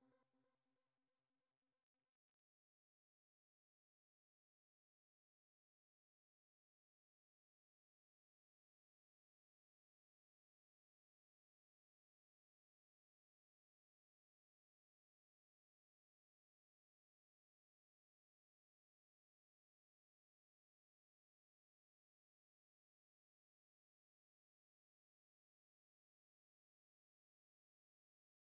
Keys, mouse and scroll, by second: 1.2 click, 3.6 b, 5.0-8.1 typing, 9.1 click, 10.3 click, 11.7 Return, 16.0 click, 16.2 right click, 16.9 click, 18.0-19.7 typing, 20.7 click, 22.3 click, 23.0 Return, 25.9 click, 28.4 click.